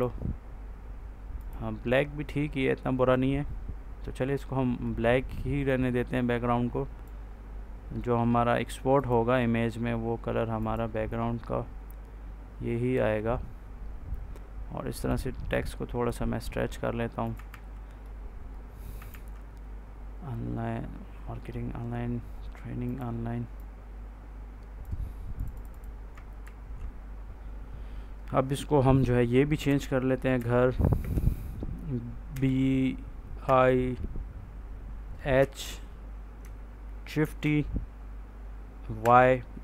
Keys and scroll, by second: 17.4 ctrl+s, 19.0 ctrl+s, 26.3 ctrl+a, 29.2-30.9 typing, 32.2 b, 33.3 i, 35.3 h, 37.1 shift+t, 38.9 y.